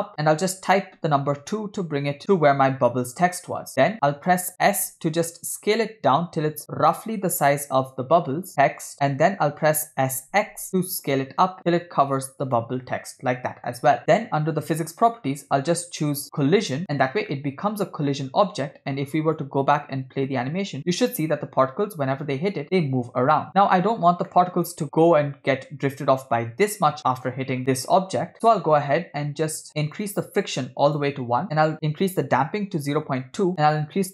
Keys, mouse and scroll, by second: 3.6-3.9 scroll down 2, 3.7 middle click, 4.7 s, 10.1 s, 14.8 click, 16.6 click, 17.4-18.5 middle drag, 19.4 click, 19.9 space, 23.6 space, 24.1 scroll down 2, 24.3 middle click, 27.1 middle click, 30.0-31.0 drag, 31.5-33.2 drag, 33.6 click.